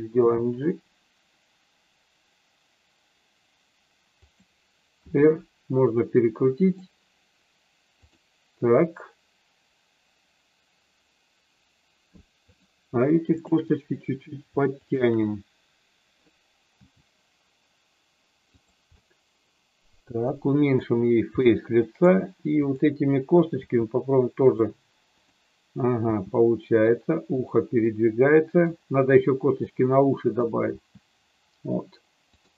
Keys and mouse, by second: 0.0 g, 4.2 click, 4.9 r, 12.4 click, 16.7 g, 18.5 click, 18.9-20.8 middle drag, 21.3 middle click, 22.6 click, 23.6 g, 24.4 click, 25.0 click, 26.0 g, 27.3 click, 27.9 middle click, 29.7 middle click, 30.7 g.